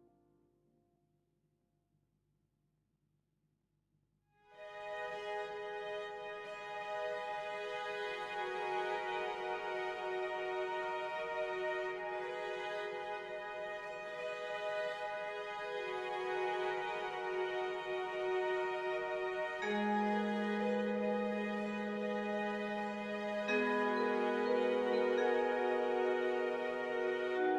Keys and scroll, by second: 5.4-18.7 typing.